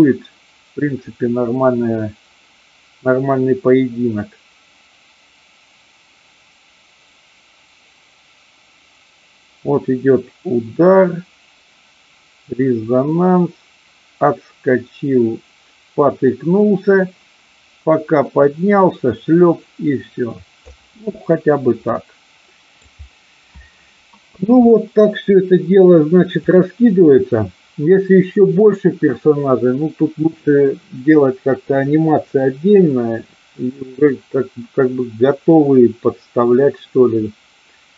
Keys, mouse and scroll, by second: 21.8-22.8 middle drag, 26.4 click.